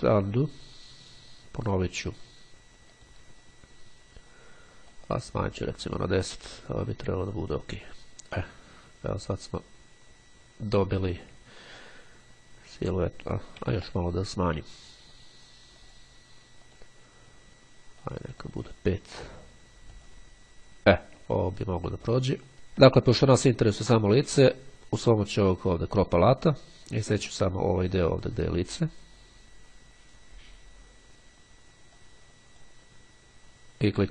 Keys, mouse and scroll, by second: 0.4 click, 2.2 click, 3.1 click, 5.0-6.7 drag, 7.4 click, 12.0-12.5 ctrl+scroll up 2, 13.0 ctrl+z, 15.9 click, 16.9 click, 18.2-19.9 drag, 20.1 click, 21.6-22.3 ctrl+scroll down 3, 22.5-22.9 ctrl+scroll up 1, 24.3-24.9 ctrl+scroll down 2, 26.1 click, 27.7-29.7 drag, 31.3-33.3 drag, 33.7-34.1 drag.